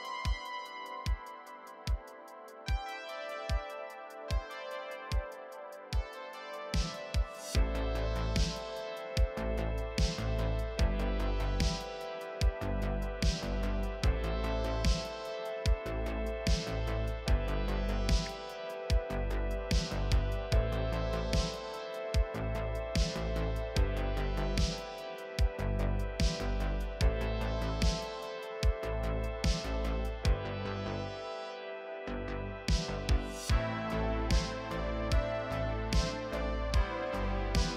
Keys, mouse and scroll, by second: 0.4-0.9 scroll down 3, 0.5 e, 0.7 middle click, 0.9 shift+middle click, 1.1 click, 1.1 KP_3, 1.2-2.7 scroll up 4, 1.2 shift+middle click, 1.3 shift+middle click, 2.7 scroll down 1, 2.7 middle click, 3.1 scroll up 1, 3.2 middle click, 3.3-5.7 typing, 3.3 middle click, 3.5 scroll down 7, 3.5 middle click, 3.7 Tab, 3.7 middle click, 3.8 middle click, 4.1 scroll up 1, 4.2 scroll down 1, 4.2 shift+middle click, 4.3 ctrl+r, 4.7 scroll down 2, 4.8 shift+middle click, 4.9 ctrl+r, 5.7 scroll down 5, 5.8 shift+middle click, 5.9 scroll up 4, 6.0 middle click, 6.1 ctrl+r, 6.4 alt+a, 6.7 scroll down 10, 6.9 click, 6.9 alt+a, 7.0 middle click, 7.0 scroll up 3, 7.2 middle click, 7.3 KP_3, 7.4 Tab, 7.8 middle click, 7.8 middle click, 7.9 Tab, 7.9 middle click, 8.0-8.5 scroll up 2, 8.0 r, 8.2 shift+middle click, 8.9 shift+middle click, 9.0 e, 9.3 scroll up 1, 9.4 scroll down 1, 9.4 shift+middle click, 9.5-10.0 scroll up 2, 10.1 click, 10.9-11.7 scroll down 4, 11.2 middle click, 11.3 middle click, 11.4 z, 11.6 middle click, 11.7 shift+middle click, 12.0-12.4 scroll up 4, 12.0 middle click, 12.2 KP_3, 12.3 click, 12.4 shift+middle click, 12.4 alt+a, 12.5 shift+middle click, 12.6 scroll down 1, 12.7 shift+middle click, 12.7 scroll up 2, 12.8 shift+middle click, 13.3 scroll down 1, 13.4 shift+middle click, 13.4 scroll up 2, 13.5 shift+middle click, 13.9 middle click, 13.9 click, 14.0 middle click, 14.3 middle click, 14.4 shift+d, 14.7 right click, 14.7 Tab, 14.9 shift+middle click, 14.9 scroll up 2, 15.1 click, 15.1 middle click, 15.2 click, 15.4-17.4 typing, 15.5 scroll down 2, 16.4 middle click, 16.5-17.0 scroll up 4, 16.7 middle click, 16.9 middle click, 17.0 middle click, 17.2 click, 17.3 middle click, 17.8 scroll down 2, 18.1-19.5 shift+middle drag, 19.5 scroll down 3, 19.6 scroll up 3, 19.7 middle click, 19.8 alt+click, 19.9-20.9 typing, 20.3 middle click, 20.4 Tab, 20.6 scroll up 3, 20.6 middle click, 20.8 middle click, 20.8 middle click, 21.0 middle click, 21.4 click, 22.3 shift+middle click, 22.4-24.0 typing, 22.6 scroll down 7, 22.6 alt+a, 22.6 middle click, 23.1 click, 23.2 shift+middle click, 23.4 scroll down 1, 23.7 middle click, 23.9 Tab, 24.2 middle click, 24.4 click, 24.6 click, 24.6 middle click, 24.7 scroll up 1, 24.8 shift+click, 25.3 middle click, 25.4-29.3 typing, 25.6 middle click, 25.7 middle click, 25.9 scroll down 3, 26.0 scroll up 1, 26.0 middle click, 26.2 click, 26.5 middle click, 26.7 scroll down 1, 26.7 middle click, 26.9 Tab, 26.9 scroll up 1, 26.9 middle click, 27.0 scroll down 1, 27.1 click, 27.1 middle click, 27.1 scroll up 1, 27.2 middle click, 27.9 middle click, 28.1 middle click, 28.1-28.6 scroll up 1, 28.6 scroll down 4, 28.7 middle click, 28.7 middle click, 28.8-29.2 scroll up 5, 28.8 middle click, 28.9 click, 29.2 middle click, 29.3 shift+middle click, 29.7 scroll up 1, 30.4 ctrl+KP_Add, 30.5 right click, 30.6 middle click, 30.6 Tab, 31.1-35.4 typing, 31.5 shift+middle click, 32.4 Tab, 32.5 scroll down 1, 32.5 middle click, 32.6 ctrl+r, 33.0 middle click, 33.6 middle click, 33.7 ctrl+a, 33.8 middle click, 33.8-34.5 scroll up 3, 34.3 shift+middle click, 34.3 Tab, 34.3 middle click, 34.5 Tab, 34.5 middle click, 35.0 scroll down 2, 35.1 scroll up 2, 35.2 middle click, 35.4 shift+middle click, 35.6 click, 35.8 scroll up 2, 36.0 shift+middle click, 36.1 shift+middle click, 36.2 scroll down 1, 36.2 shift+middle click, 36.3 scroll up 1, 36.4 shift+middle click, 36.4-37.5 scroll down 3, 36.9 middle click, 37.0 z, 37.1 shift+middle click, 37.5 middle click, 37.7 scroll up 2.